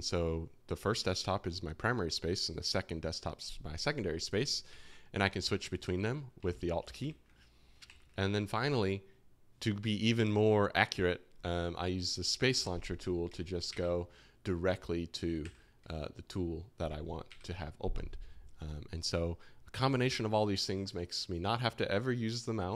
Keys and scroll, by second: 4.7 alt+2, 5.1 alt+1, 5.4 alt+2, 5.7 alt+1, 6.3 alt+2, 6.9 alt+1, 7.8 alt+2, 13.2-15.4 typing, 16.8 space, 17.2 a.